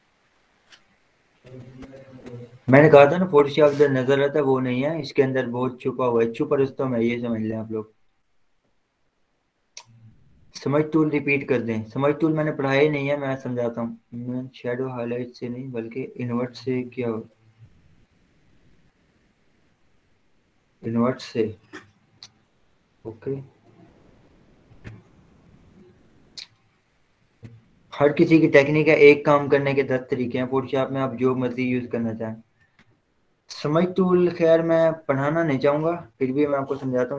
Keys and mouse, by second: 33.0-36.1 drag.